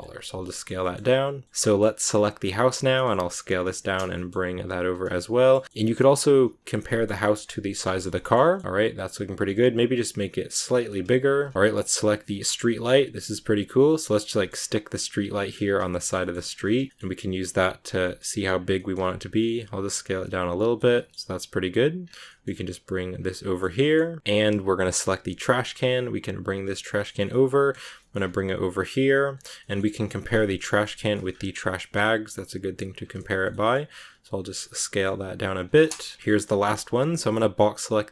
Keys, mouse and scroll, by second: 0.1 middle click, 0.7 g, 1.4-3.1 shift+middle drag, 3.1 s, 3.7 shift+middle click, 4.0 g, 5.1-6.1 middle drag, 6.1 s, 6.7 middle click, 7.0 g, 7.8 shift+middle click, 8.0 scroll up 1, 8.6-9.0 scroll down 1, 9.0 right click, 9.3 s, 11.5 middle click, 11.7 right click, 12.1 g, 13.6 middle click, 14.2 g, 15.4 scroll up 2, 15.8 shift+middle click, 16.1 g, 16.6 middle click, 17.1 s, 17.9 middle click, 18.1 scroll up 1, 18.3 s, 18.7 middle click, 18.9 s, 19.4 scroll up 1, 19.5-20.7 middle drag, 20.7 scroll up 1, 20.7 scroll down 1, 20.8 middle click, 21.8 right click, 21.9 scroll down 2, 22.1 g, 23.2 middle click, 23.7 g, 24.2 right click, 25.1 g, 26.6-27.8 middle drag, 27.8 g, 29.4 g, 30.3 middle click, 31.2 scroll up 2, 31.3 scroll down 1, 31.6-31.9 scroll up 2, 31.7 middle click, 32.1 s, 34.5 middle click, 35.0 scroll down 1, 35.2 s, 36.1 KP_Decimal, 36.2 shift+middle click, 36.5 b.